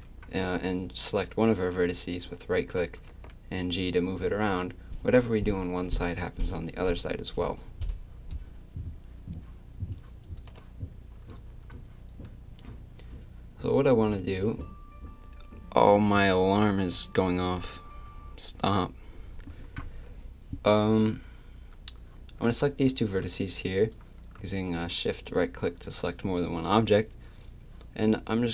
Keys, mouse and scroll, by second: 3.1 g, 14.1-28.5 drag.